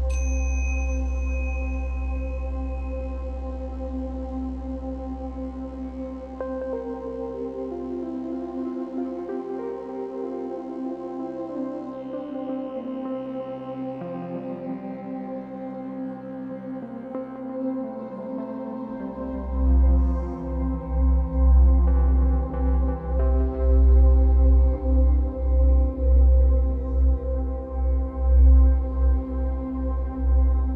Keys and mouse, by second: 0.7 click, 1.9 click, 4.2 alt+shift+click, 4.9 click, 5.8 typing, 7.6 click, 8.2 typing, 9.2-9.6 ctrl+alt+drag, 9.7-11.1 alt+shift+drag, 11.2 alt+click, 11.2 typing, 12.2-12.6 typing, 13.5 click, 14.2 typing, 15.4 click, 16.4 typing, 18.6 typing, 19.6 click, 20.3 typing, 21.6 click, 22.3 typing, 23.3 click, 24.1 typing, 24.9 click, 25.4-26.7 alt+drag, 27.2-27.6 ctrl+alt+drag, 28.4-29.5 ctrl+alt+drag, 29.5 typing, 30.6-30.7 drag.